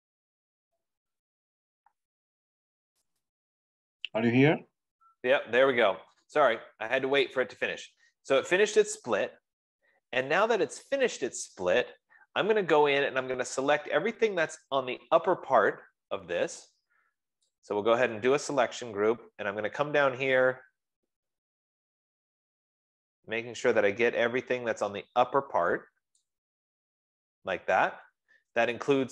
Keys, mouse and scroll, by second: 4.6 click, 9.1-9.5 scroll, 10.0-10.4 scroll, 10.7-11.4 scroll, 11.9 middle click, 14.3 middle click, 20.7-21.4 scroll, 21.7 scroll, 21.8 F15, 22.4-23.4 scroll, 24.4 scroll, 26.6 click.